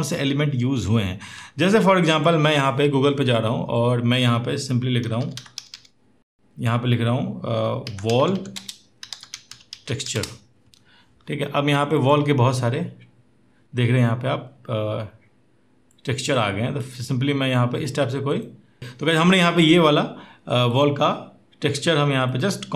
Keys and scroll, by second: 6.3 typing, 7.9-9.9 typing.